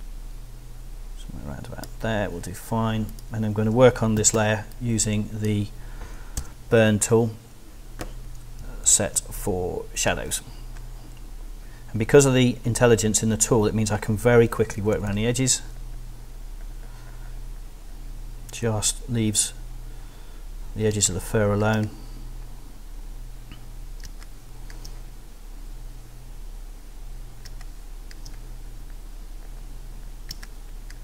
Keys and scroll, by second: 4.2 z, 6.4 o, 8.8 shift+o, 14.5 ], 20.9 space, 24.0 space, 27.5 space, 30.3 space.